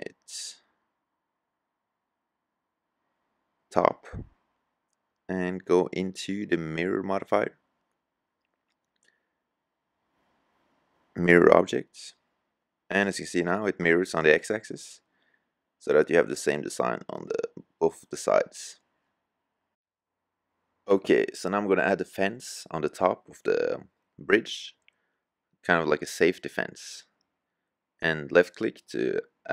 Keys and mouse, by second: 3.2-4.4 drag, 4.9-7.4 drag, 9.1-10.9 drag, 14.3-15.4 middle drag, 20.3-21.1 middle drag.